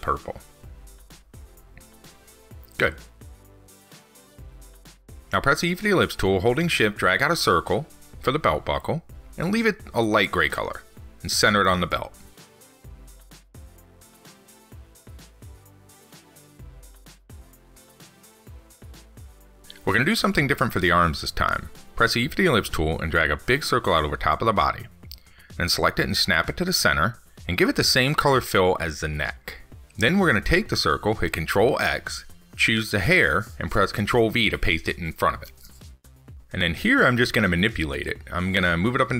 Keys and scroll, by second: 15.2 ctrl+s, 32.2 ctrl+x.